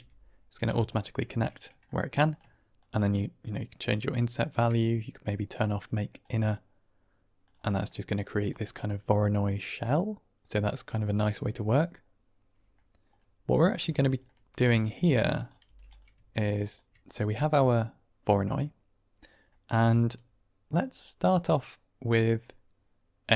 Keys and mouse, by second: 0.8 ctrl+right click, 1.8 middle click, 2.7-4.4 shift+drag, 5.4 click, 6.2 middle click, 7.3 click, 7.8 middle drag, 8.5-10.4 middle drag, 11.6-12.6 middle drag, 13.4 drag, 13.7 typing, 14.1 click, 15.3 click, 15.5 g, 16.5 ctrl+right click, 17.0-17.6 middle drag, 20.8-22.3 drag.